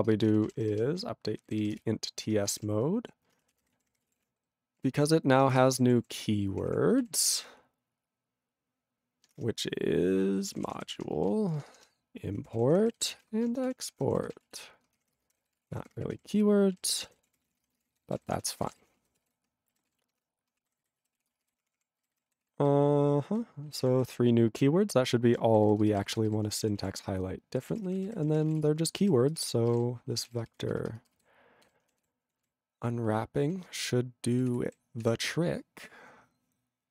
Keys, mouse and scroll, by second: 1.8 ctrl+Return, 2.6 alt+>, 3.2-4.6 typing, 4.8 ctrl+r, 5.6 Return, 5.9 ctrl+=, 6.5 ctrl+p, 7.0 ctrl+e, 7.3 Return, 9.3-20.2 typing, 19.9 ctrl+s, 20.7 ctrl+a, 20.8 ctrl+n, 21.2 ctrl+s, 21.3 ctrl+space, 21.3 ctrl+e, 21.4 ctrl+g, 21.6 ctrl+p, 22.0 ctrl+n, 22.4 ctrl+s, 22.5 ctrl+n, 23.8 ctrl+s, 24.0 ctrl+n, 24.3 ctrl+p, 25.5 ctrl+n, 25.8 ctrl+space, 26.2 ctrl+alt+f, 26.3 ctrl+g, 26.6 ctrl+s, 26.8 ctrl+a, 26.9 ctrl+n, 27.4 ctrl+n, 27.6-29.0 typing, 29.0 ctrl+e, 29.3 ctrl+space, 29.4 ctrl+a, 29.7 ctrl+g, 29.7 ctrl+e, 30.3 ctrl+s, 30.6 ctrl+alt+f, 30.9 ctrl+space, 31.3 ctrl+alt+b, 31.6 ctrl+g, 32.0 ctrl+s, 32.3 ctrl+r, 33.1 ctrl+r, 34.3 ctrl+s.